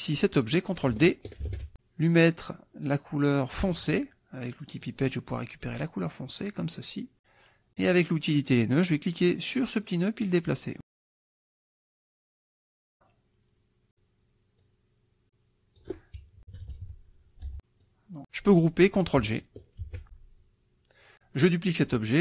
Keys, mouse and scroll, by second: 1.5 ctrl+d, 4.8 click, 6.4 click, 7.8 click, 9.9 click, 12.9-14.1 drag, 14.6-16.4 drag, 16.6 KP_Subtract, 17.5 F1, 17.6 click, 17.8 click, 20.4 ctrl+g.